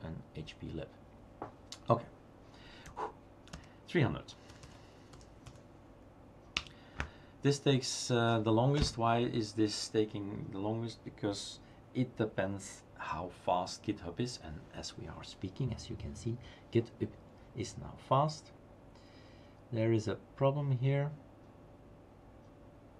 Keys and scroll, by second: 2.9 Up, 5.2-5.9 typing, 6.6 Return.